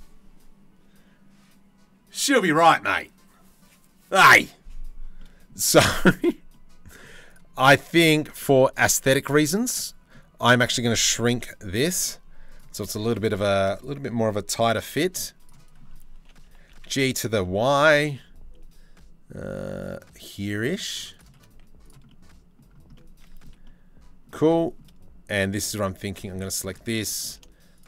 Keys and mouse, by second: 4.8 middle click, 5.7-7.5 shift+middle drag, 8.0 shift+middle click, 9.2 Tab, 9.3 middle click, 11.0 KP_3, 11.5 z, 13.0 1, 14.4 c, 16.1 g, 21.1 z, 21.7 middle click, 22.5 middle click, 23.2 middle click, 24.0 2, 25.7 shift+middle click, 26.7 middle click, 27.7 shift+middle click.